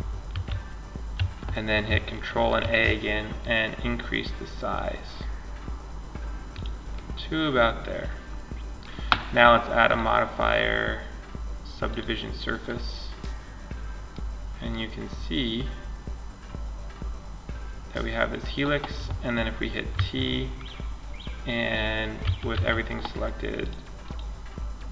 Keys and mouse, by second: 0.4 z, 1.8 ctrl+a, 6.1-7.6 middle drag, 9.1-10.9 drag, 10.9-12.1 middle drag, 19.1 t, 21.4 a, 21.7 a, 22.9-24.9 drag.